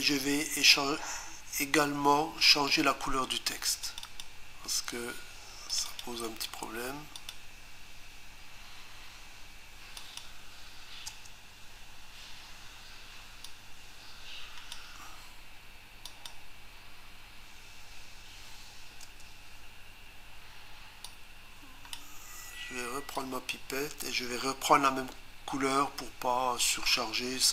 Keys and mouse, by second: 3.9 click, 4.1 click, 4.2 double click, 5.7 click, 5.9 click, 6.0 double click, 7.2 click, 10.0 click, 11.1 Return, 13.4 click, 16.1 click, 21.1 click, 23.2 click.